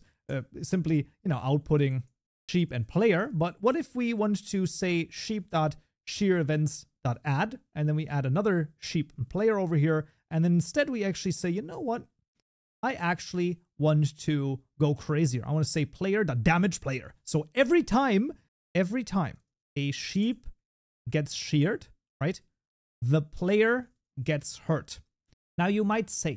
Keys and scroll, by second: 6.1 Tab, 15.8 Tab, 16.7 ctrl+s, 25.3 ctrl+s.